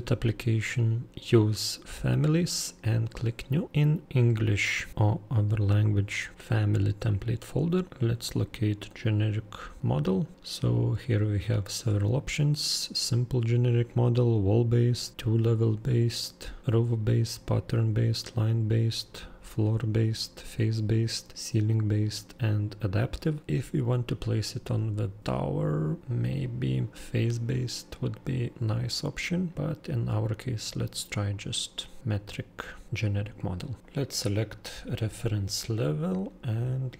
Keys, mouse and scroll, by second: 3.6 click, 4.0 middle click, 4.4 middle click, 5.9 middle click, 7.1 middle click, 7.2 middle click, 7.9 middle click, 8.1 middle click, 10.3 middle click, 31.1 click, 33.9 click.